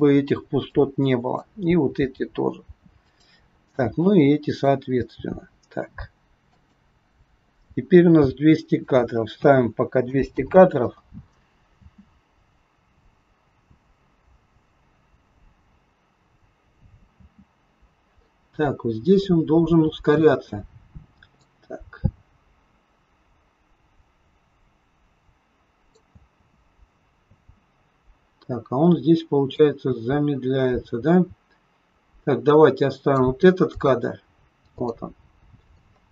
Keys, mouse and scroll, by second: 0.7 click, 1.7 g, 3.9 click, 4.9 g, 8.8 click, 10.2 KP_0, 11.7 space, 17.2 space, 18.7 scroll up 2, 19.2 middle click, 20.4 scroll up 2, 21.4 click, 26.1 space, 27.3 space, 29.6 click, 33.6 click, 34.7 click, 35.3 scroll up 3, 35.7 middle click.